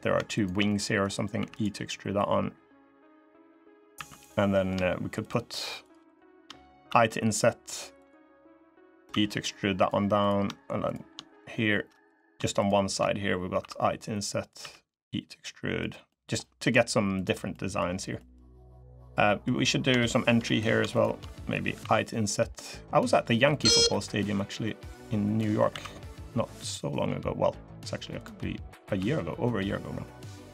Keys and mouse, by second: 0.2 shift+click, 0.4 click, 1.1 e, 1.9-3.2 drag, 3.4 click, 3.7 3, 3.9 click, 4.3 click, 5.0 shift+click, 5.9 shift+click, 6.6 i, 8.9 e, 11.9 click, 14.3 i, 14.3 e, 15.8 click, 16.9 click, 17.3 click, 17.9 click, 18.4 click, 19.0 click, 19.8 shift+middle click, 21.1 middle click, 25.5 alt+e, 28.7 s.